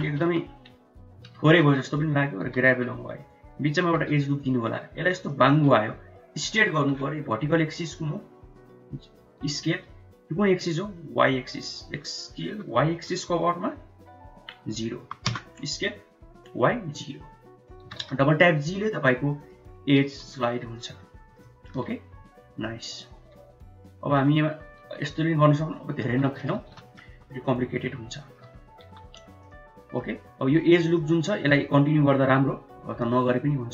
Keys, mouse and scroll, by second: 0.0 KP_1, 0.3 KP_3, 1.4 shift+z, 1.9 click, 2.5 g, 3.9 ctrl+r, 9.5 s, 11.4 s, 17.9 g, 20.1 g, 21.5 shift+middle click, 22.9 click, 23.3 g, 24.8 r, 26.7 shift+z, 26.9 middle click, 27.1 Tab, 27.5 middle click, 27.7 click, 28.0 middle click, 28.5 Tab, 28.9 1, 29.6 click, 29.9 middle click, 31.1 middle click, 32.4 k.